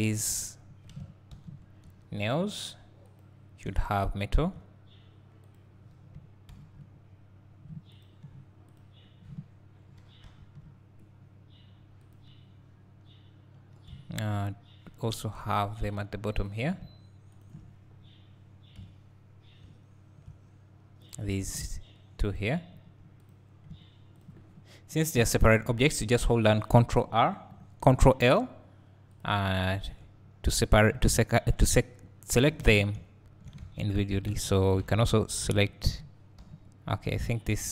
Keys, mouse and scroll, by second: 0.1 1, 0.4 click, 1.3 ctrl+l, 3.3 click, 3.7 `, 5.5 click, 8.8 click, 10.4 ctrl+l, 12.2 click, 13.1-13.9 scroll up 1, 16.5 click, 17.4 shift+click, 18.8 KP_Decimal, 19.6 `, 21.1 click, 23.3 click, 24.3 ctrl+click, 25.2 ctrl+l, 29.3 click, 29.8 Tab, 30.7-31.1 scroll up 2, 31.1 `, 31.8-32.2 scroll down 2, 33.0 `, 33.7 Tab, 34.4 Tab, 34.5 click, 34.9 Tab, 35.4 click, 36.5 ctrl+l.